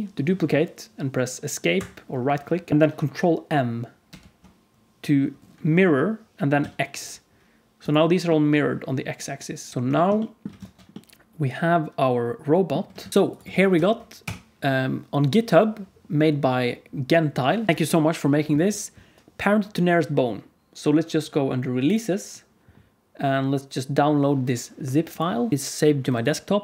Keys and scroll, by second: 4.0 ctrl+m, 9.7 alt+a, 9.7 ctrl+s, 10.5 alt+shift+z, 13.0 alt+shift+z.